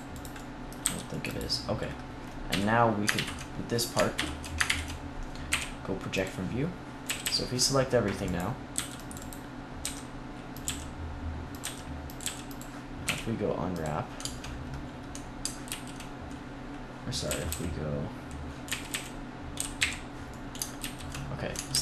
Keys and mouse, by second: 0.1-3.0 drag, 0.7 c, 2.4 KP_3, 3.0 ctrl+KP_3, 4.5 ctrl+KP_1, 5.4 u, 6.9 a, 7.1 a, 8.3-11.4 drag, 8.6 c, 9.7-12.9 typing, 11.5-13.2 drag, 15.6 ctrl+z, 17.2 a, 17.4 a, 18.6 a, 18.8 a, 19.4 j, 19.7 h, 20.7 ctrl+z, 21.6 ctrl+s.